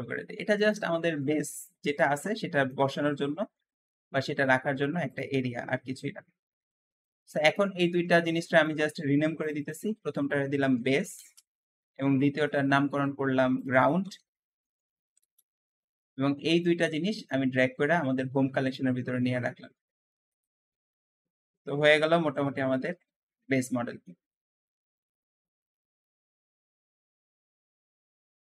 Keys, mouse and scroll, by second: 0.8-2.8 middle drag, 2.8-3.2 scroll up 1, 3.2 s, 3.4 x, 5.4-9.3 middle drag, 9.3 shift+click, 10.0-12.4 shift+drag, 10.5 b, 10.6 a, 10.7 s, 10.8 e, 11.0 Return, 13.4-16.6 drag, 13.9-14.9 typing, 15.0 Return, 17.2 shift+click, 20.2 click, 20.8-21.1 scroll down 1, 21.1-24.2 middle drag.